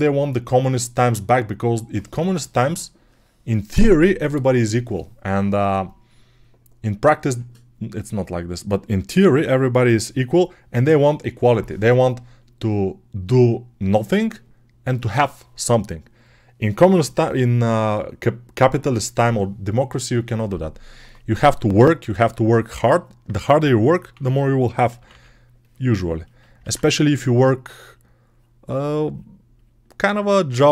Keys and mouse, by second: 24.0 6, 24.8 ], 24.9 ], 26.5 alt+q, 29.5-30.7 shift+right drag.